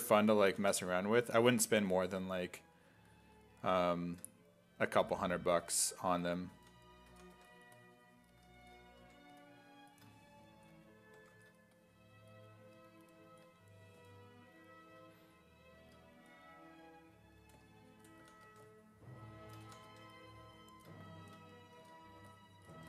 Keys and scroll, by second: 0.5 s, 0.8 1, 2.5 1, 5.6-7.8 typing, 9.0 1, 11.2 1, 14.0 s, 18.2-20.4 typing, 21.8 s.